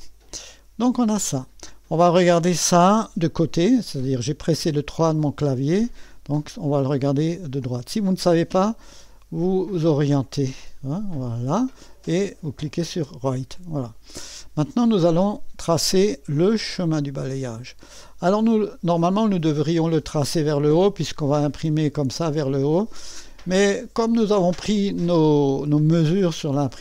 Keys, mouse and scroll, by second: 0.0 click, 1.1 click, 3.3 3, 7.6-11.6 drag, 12.6 click, 13.9-15.3 right drag, 16.8 click, 18.4 3, 23.2 right click.